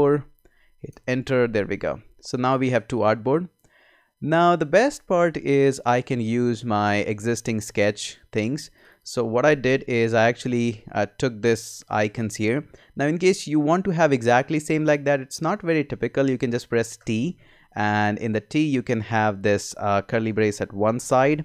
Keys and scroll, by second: 0.0-0.3 typing, 1.7 Return, 17.0 t.